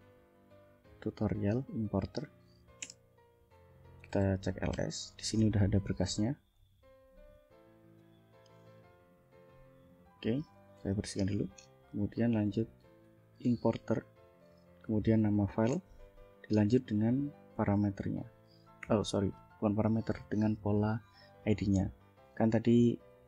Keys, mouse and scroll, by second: 2.1 click, 2.9 Return, 3.9-4.8 typing, 6.5-7.5 drag, 10.8 ctrl+l, 12.2-13.8 typing, 15.8 Tab, 17.3-18.9 typing.